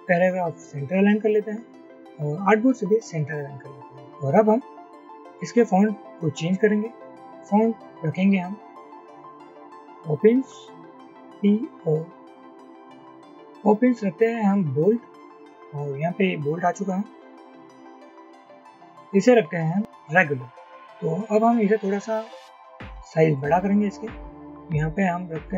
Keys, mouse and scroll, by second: 11.3-11.8 typing, 13.4 typing, 17.9 typing.